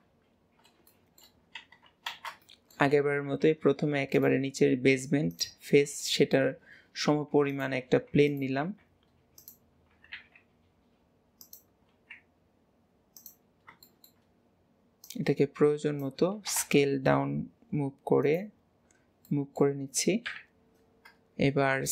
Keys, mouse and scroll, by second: 0.6-0.9 scroll down 2, 0.9-2.1 shift+middle drag, 2.1 alt+z, 2.5 shift+middle click, 3.0-3.5 scroll up 2, 3.5 g, 5.7 scroll up 3, 6.1 shift+middle drag, 6.5 scroll up 1, 14.3 scroll up 1, 15.1 click, 18.7 scroll, 18.9-19.3 scroll down 4, 19.3-20.3 middle drag, 20.4 KP_3, 21.4-21.9 scroll down 7.